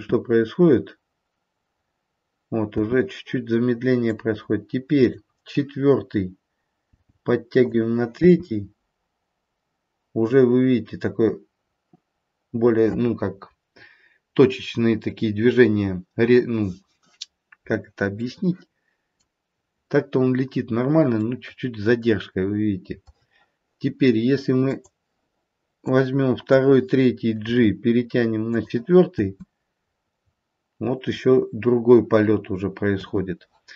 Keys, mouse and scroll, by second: 2.8 space, 4.1 click, 6.8 g, 8.2 space, 18.2 middle click, 21.1 middle click, 24.6 click, 25.8 click, 27.4 g, 29.1 space, 32.9 space.